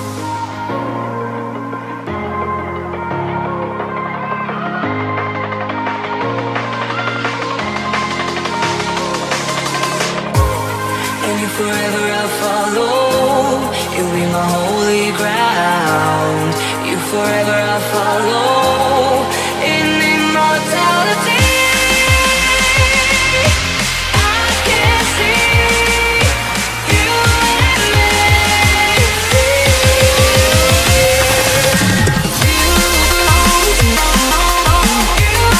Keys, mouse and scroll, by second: 0.0-1.4 typing, 1.5 Return, 3.5 click, 6.5 F10, 7.2 click, 12.5-13.1 scroll down 2, 13.5 click, 14.6 scroll up 1, 15.0 right click, 15.2 Tab, 15.3 F10, 16.2 click, 17.1-18.6 typing, 19.5 Return, 20.5-23.9 drag, 24.3-26.1 typing, 26.5 Return, 27.5-30.0 drag, 30.0 Tab, 30.2 right click, 31.4 click, 31.7-33.4 typing.